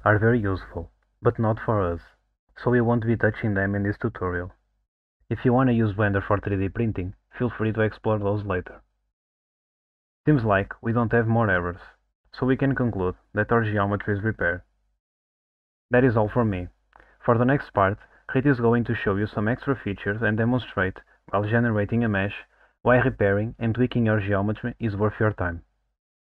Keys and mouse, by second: 6.5 click, 10.0-10.6 middle drag, 11.6 alt+middle click.